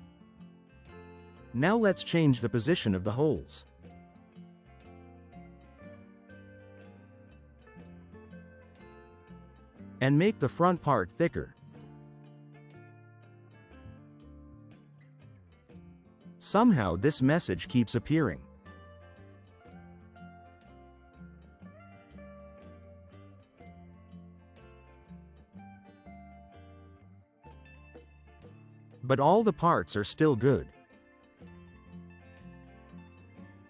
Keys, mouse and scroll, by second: 1.1 click, 1.6-2.6 typing, 4.7 click, 5.2-6.1 typing, 10.7 click, 11.2 1, 11.7 0, 11.9 Return, 16.6 click, 22.2 click, 22.5-27.2 drag, 29.5 click, 30.1-33.4 typing, 30.4 click, 31.6 click, 32.3 click, 33.1 click.